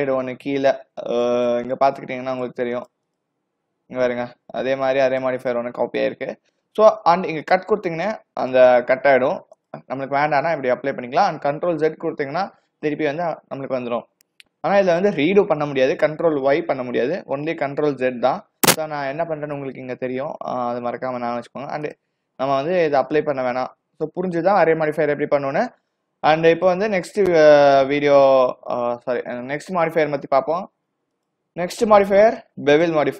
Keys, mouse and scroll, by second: 1.7 click, 2.4 click, 2.8 click, 3.1 click, 5.1 click, 5.5 click, 7.5 click, 8.5 click, 9.6 click, 10.7-11.8 scroll up 7, 12.4 ctrl+z, 16.8 ctrl+y, 18.0 ctrl+z, 21.9 click, 23.6 click, 31.2 click.